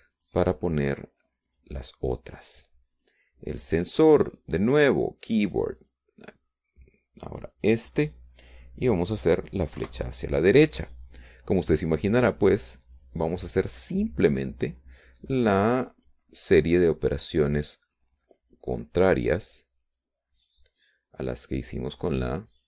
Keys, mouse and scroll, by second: 0.6 scroll down 2, 1.5 middle click, 3.2 click, 4.5 click, 5.9 click, 7.7 click, 8.8 click, 10.6 click, 12.8 Right, 15.4 click, 16.0 click, 16.3 middle click, 16.9-17.9 drag, 17.9 middle click, 18.8 click, 19.1-21.3 middle drag, 21.3 click.